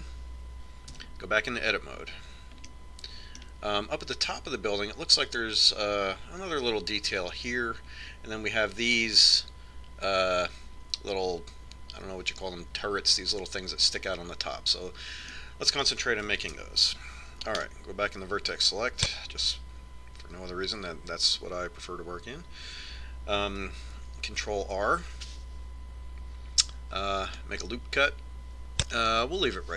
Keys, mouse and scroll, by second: 2.2 Tab, 4.0-5.8 middle drag, 16.6-18.4 middle drag, 17.9 ctrl+Tab, 25.6 ctrl+r.